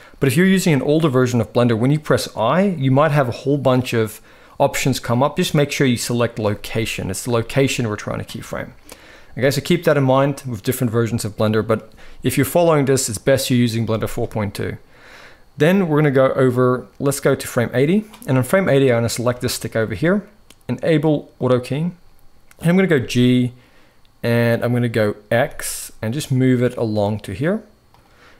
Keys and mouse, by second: 16.3-17.8 drag, 19.1-19.4 shift+middle drag, 21.1 click, 22.6 g.